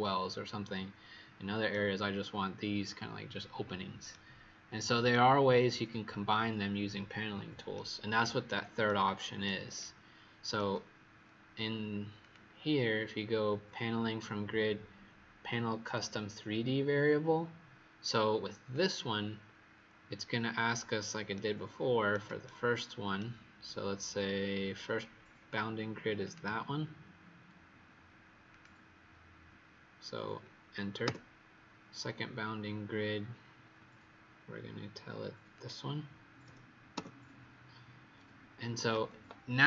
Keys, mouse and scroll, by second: 12.1 click, 21.3 right click, 24.1-24.6 scroll up 2, 24.8-25.8 scroll up 9, 26.1 click, 31.0 Return, 35.4 click, 36.9 Return.